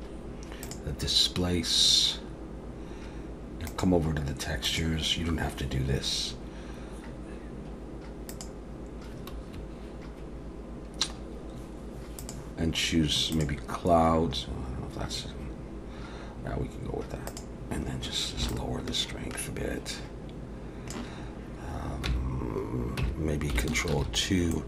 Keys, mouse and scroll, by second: 3.7 click, 4.6 click, 8.3 click, 11.3 scroll down 1, 12.2 click, 17.3 click, 18.5 shift+click, 22.1 Tab, 23.0 Tab, 24.0 ctrl+2, 24.5 middle click.